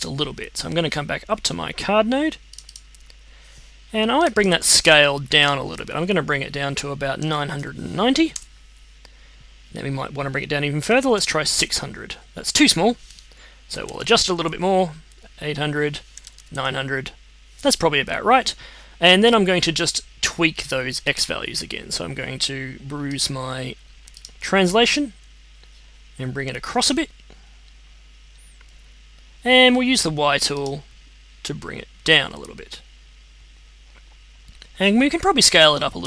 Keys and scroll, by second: 7.2 9, 7.5 0, 8.3 Return, 10.6-11.4 typing, 11.5 Return, 13.4-14.3 typing, 15.8-16.7 typing.